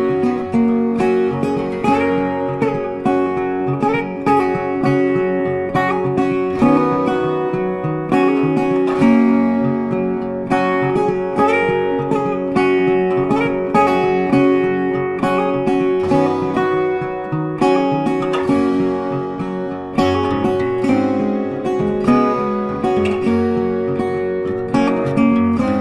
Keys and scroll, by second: 6.7 ctrl+t.